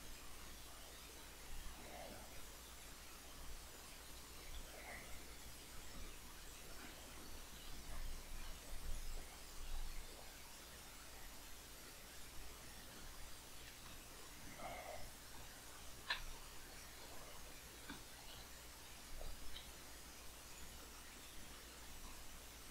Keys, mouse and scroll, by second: 1.0 g, 2.6 r, 4.2 g, 5.6-7.2 middle drag, 6.6 click, 7.2-8.4 right drag, 7.4 g, 9.0-10.5 middle drag, 10.2-12.0 right drag, 10.8 e, 12.2 r, 13.6 g, 14.4 g, 16.1 KP_1, 17.7 middle click, 18.3-19.7 middle drag, 19.1-22.7 right drag, 19.3 g, 21.4 g.